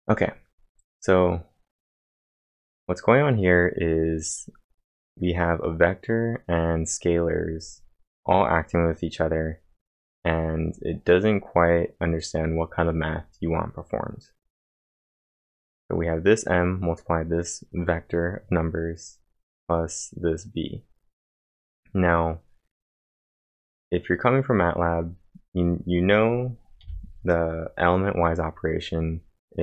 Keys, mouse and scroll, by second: 0.3 click, 11.6-12.9 scroll up 1, 12.9 click, 21.7-22.4 typing, 21.9 click, 25.1 click, 26.8 l.